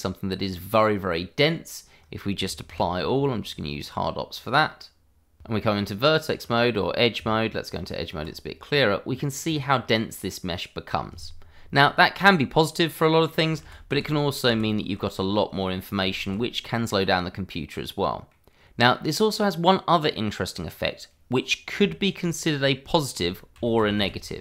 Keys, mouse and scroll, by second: 1.8 q, 3.2 click, 4.1 middle click, 4.5 Tab, 6.1 scroll up 1, 6.6 Tab, 8.3-8.8 scroll up 1, 8.8-9.2 scroll down 1, 9.2 click, 9.6 scroll up 1, 9.9 middle click, 12.4-12.8 scroll down 1, 12.8 middle click, 13.6 ctrl+z, 15.1 scroll down 1, 15.6 middle click, 16.0 ctrl+z, 16.7-17.0 scroll up 1, 17.0 middle click, 18.6 scroll down 1, 18.8 middle click, 21.3-21.8 scroll up 1, 22.0 ctrl+z, 22.7 click, 22.9 Tab, 23.7 middle click, 24.0 click.